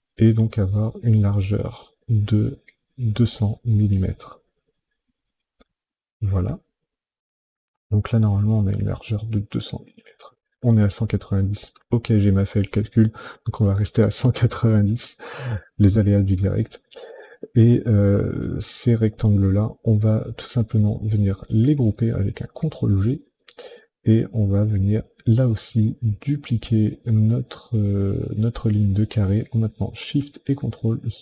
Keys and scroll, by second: 0.9 ctrl+j, 2.5 ctrl+j, 3.9 ctrl+j, 21.3 ctrl+g.